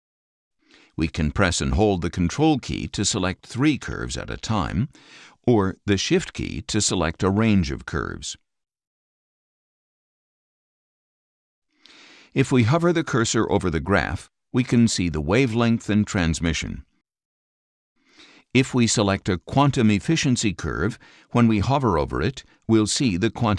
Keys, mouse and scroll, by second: 1.9 click, 3.1 ctrl+click, 4.0 ctrl+click, 4.1 scroll down 2, 5.0 click, 8.0 shift+click, 10.3 click, 11.3 shift+click, 19.5 click.